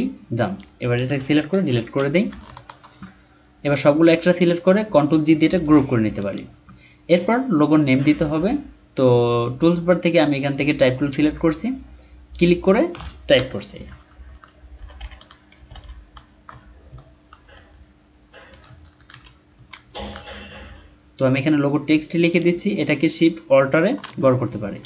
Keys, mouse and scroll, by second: 1.5 BackSpace, 2.5-2.9 alt+scroll down 1, 5.6 ctrl+g, 8.0-8.7 scroll down 1, 10.4 right click, 13.4 BackSpace, 14.5-16.5 typing, 18.5-20.4 typing, 24.0 alt+shift+click.